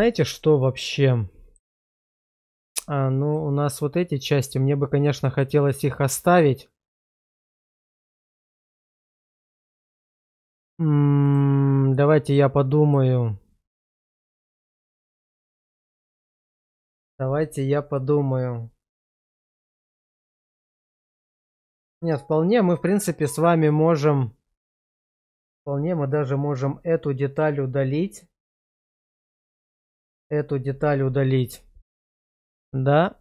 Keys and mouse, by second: 0.3-1.5 middle drag, 3.3-3.7 middle drag, 12.9-15.5 middle drag.